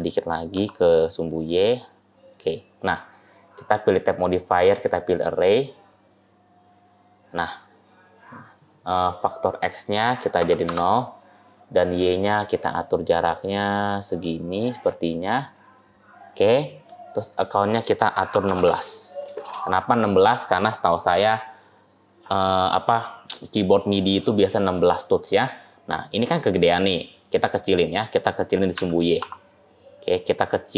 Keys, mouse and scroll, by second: 2.0 scroll down 1, 2.0-2.5 scroll up 1, 2.5-4.0 scroll down 1, 4.0 scroll down 1, 4.0 click, 5.1 click, 9.0 click, 12.0 click, 15.4 click, 17.1 click, 20.9 middle click, 24.2 shift+middle click, 25.2 click, 25.9 middle click, 27.5 middle click, 28.6 s.